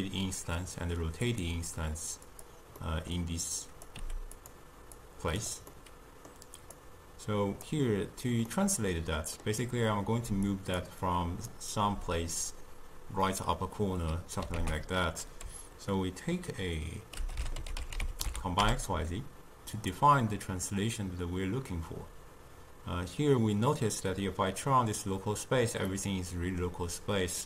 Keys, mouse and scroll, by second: 2.8-3.6 middle drag, 3.6 click, 4.0 g, 5.0 click, 5.7-6.8 middle drag, 6.8-8.5 drag, 8.5-10.3 middle drag, 10.3 d, 10.5 click, 10.8 d, 11.1 click, 11.5 d, 13.1 d, 14.6 ctrl+a, 20.7-23.8 drag, 25.9-27.4 middle drag.